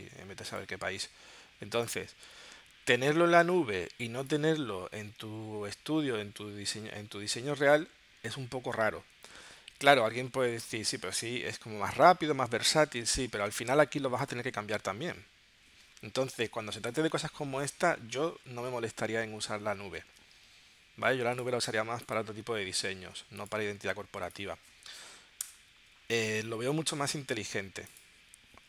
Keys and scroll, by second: 2.8 super+Tab, 10.3 super+Tab, 13.4 super+Tab, 16.3 shift+super+g, 20.1 super+Tab, 25.5 BackSpace.